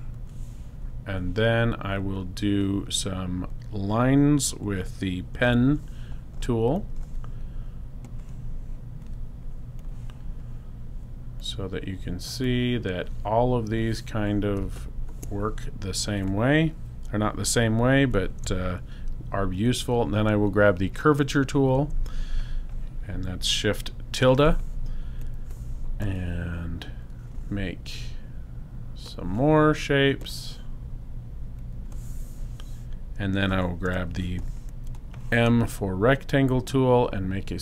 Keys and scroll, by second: 5.5 p, 21.5 shift+`, 34.0 m, 34.9 shift+m.